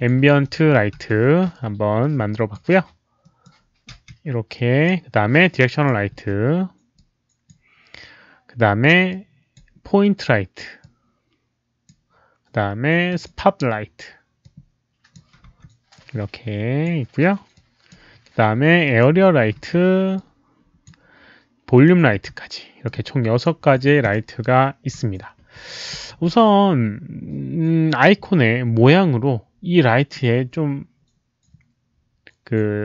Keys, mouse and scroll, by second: 0.4 click, 1.0 w, 2.0-2.5 drag, 3.0-3.9 typing, 3.2 alt+click, 3.2 alt+right click, 4.5 click, 5.7 click, 6.1 w, 6.9-7.4 drag, 9.1 click, 10.8-11.8 drag, 13.1 click, 14.4-15.1 drag, 15.4 z, 15.9 click, 17.5-17.9 drag, 18.8 click, 19.6 w, 20.1-20.8 drag, 21.7 click, 22.8-23.4 drag, 24.0 click.